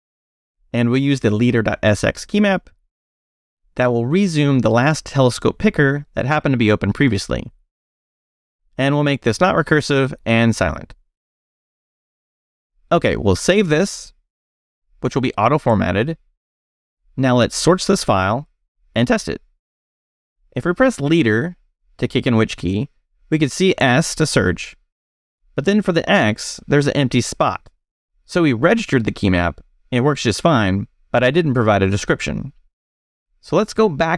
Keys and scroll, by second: 0.3 Return, 0.7-6.2 typing, 1.0 Right, 6.8 ctrl+n, 7.4 Right, 7.5-12.1 typing, 12.4 Escape, 13.7 shift+;, 14.3 shift+w, 16.3 a, 16.6 Return, 17.8-18.9 typing, 19.8 Return, 20.6 space, 24.6 s, 29.0 x.